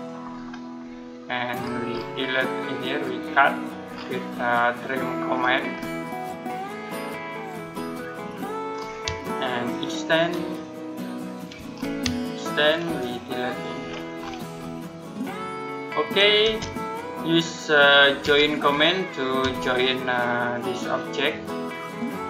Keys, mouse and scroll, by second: 0.1-0.7 scroll down 1, 0.7 middle click, 1.4-1.9 scroll up 1, 2.7 click, 3.7-4.2 scroll down 1, 4.5 middle click, 5.1-6.7 scroll up 1, 6.7 click, 7.5-7.8 scroll down 1, 8.5-8.8 scroll up 1, 11.2 shift+click, 11.6-11.9 scroll up 1, 12.4 shift+click, 13.7-14.7 scroll down 1, 14.7 middle click, 16.3 space, 18.1 j, 19.3 space, 20.4 click.